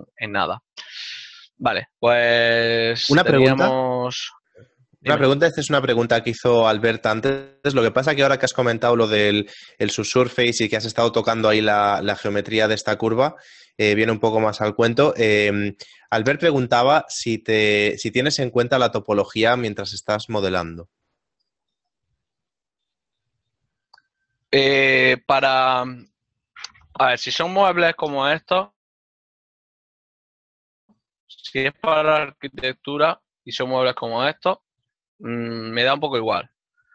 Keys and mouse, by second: 0.3 click, 3.9 ctrl+middle click, 35.1 click.